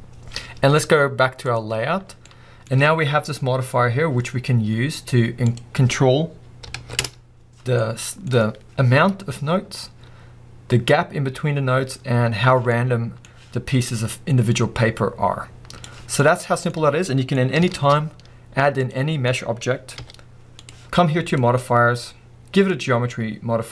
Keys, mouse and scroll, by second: 2.1 scroll down 2, 2.3-7.0 middle drag, 2.7-3.0 scroll up 2, 7.0 Return, 7.0 click, 7.8-14.1 middle drag, 14.1-16.2 drag, 16.2-20.0 middle drag, 16.9 scroll down 2, 18.9 shift+a, 19.0 scroll down 2, 19.7-20.0 scroll up 2, 20.0 g, 20.7 click, 22.8-23.7 drag.